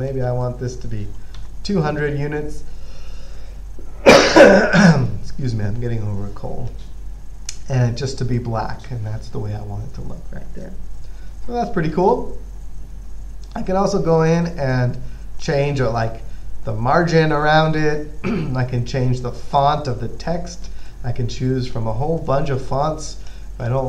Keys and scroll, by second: 1.6 2.